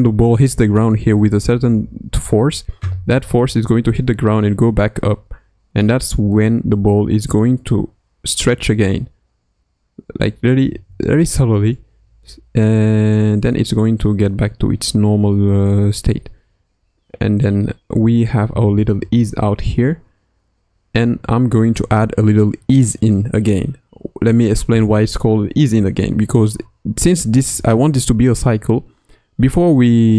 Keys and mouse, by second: 5.9 Right, 7.7 Right, 8.7 Right, 10.6 Left, 11.1 Right, 12.5 Right, 13.9 Right, 16.1 Right, 16.5 Right, 16.7 Right, 18.1 Right, 18.5 Left, 18.7 Left, 19.0 Right, 19.4 Right, 20.7 Right, 21.1 Right.